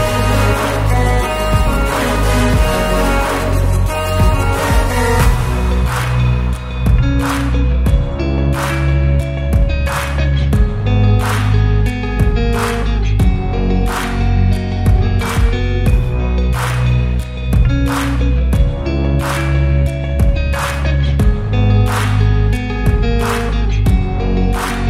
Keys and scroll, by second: 1.5 space, 1.8 l, 2.6 space, 3.0 p, 4.6 Return, 6.1 e, 7.7 space, 8.1 p, 9.7 Return, 10.9 m, 11.6 Up, 13.0 BackSpace, 13.3 8, 13.8 Return, 14.2 space, 14.9 l, 16.1 space, 16.5 p, 17.7 space, 19.9 m, 21.7 Return, 22.9 1, 23.7 Return, 24.1 space.